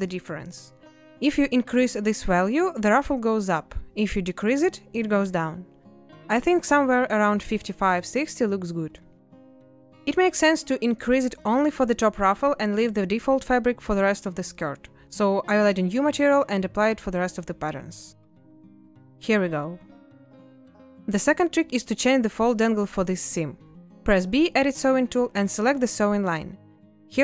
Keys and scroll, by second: 24.3 b.